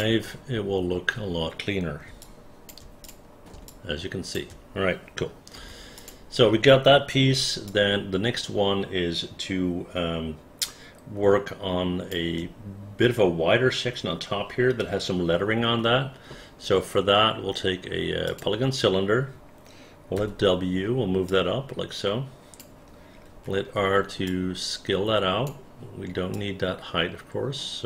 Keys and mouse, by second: 0.0 click, 2.3 alt+click, 3.1 alt+click, 3.8 alt+click, 5.7 1, 6.1 click, 7.8-12.2 alt+drag, 21.4-22.7 drag, 23.4 r, 24.4-25.6 drag.